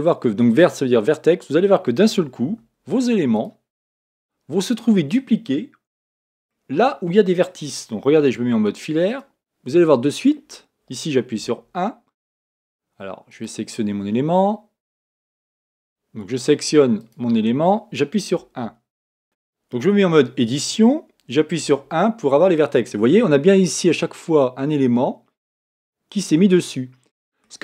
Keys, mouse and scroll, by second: 0.0 click, 2.4 z, 3.8-8.2 middle drag, 8.2 z, 9.8-11.4 middle drag, 11.4 1, 13.3-15.3 right drag, 15.3-17.1 drag, 18.4 1, 19.2 Tab, 21.6 Tab, 21.6 1, 23.0-27.6 middle drag.